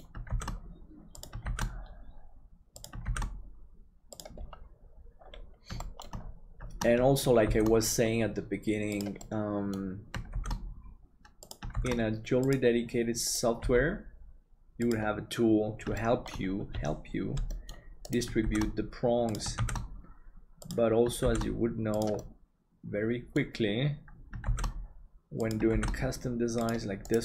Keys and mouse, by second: 5.9 middle click, 7.4 shift+d, 9.3 middle click, 13.6 g, 16.0 middle click, 17.6 middle click, 18.5 shift+d, 22.2-23.5 middle drag, 24.5 shift+d.